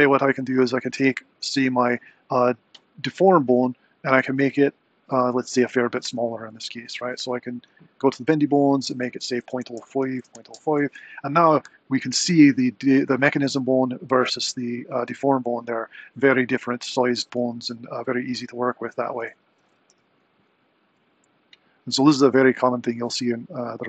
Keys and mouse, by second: 8.0 click, 8.7-10.9 drag, 11.8 click, 14.0 click, 19.3 super+Down, 19.8 r.